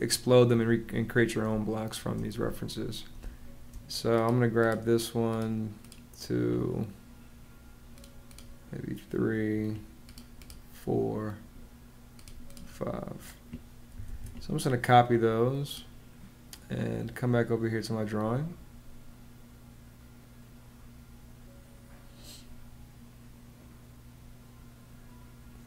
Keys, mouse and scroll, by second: 1.2 space, 2.9 space, 13.8 super+c.